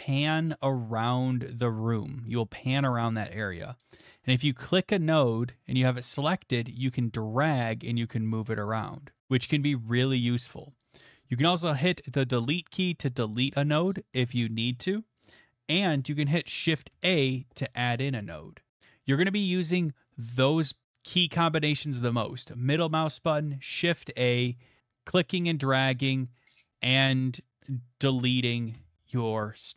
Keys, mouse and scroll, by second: 3.6-8.7 middle drag, 8.9-12.4 drag, 12.5 Delete, 16.9 a, 25.9 click, 28.7 Delete.